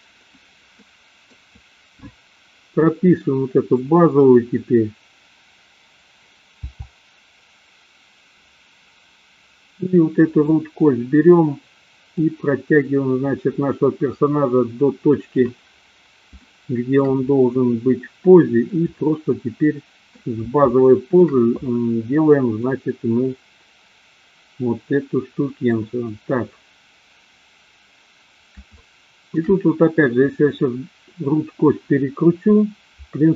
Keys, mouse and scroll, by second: 0.7 middle click, 10.2 click, 12.1-15.6 drag, 16.4-17.0 shift+middle drag, 17.7-18.7 middle drag, 19.2-20.1 middle drag, 20.7-21.2 shift+middle drag, 22.7-25.7 middle drag, 28.7-29.4 shift+middle drag.